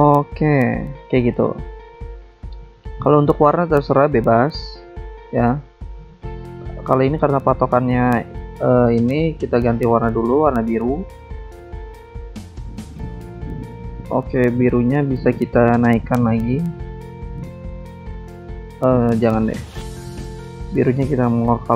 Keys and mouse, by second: 0.1 click, 1.1 click, 2.9 click, 4.9 click, 5.7 click, 6.3 click, 7.4 click, 9.1 click, 10.0 click, 10.9 alt+Tab, 11.7 alt+Tab, 13.1 alt+Tab, 13.4 alt+Tab, 14.4 click, 14.9 click, 15.1 double click, 15.6 double click, 16.5 double click, 18.5 click, 19.3 click, 20.3 click, 21.6 click.